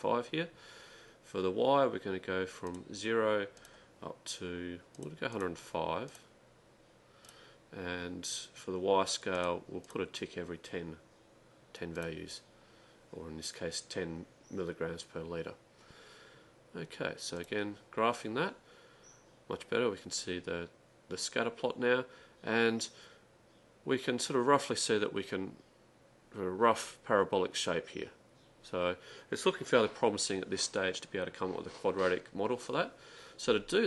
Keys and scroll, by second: 9.7-10.4 typing.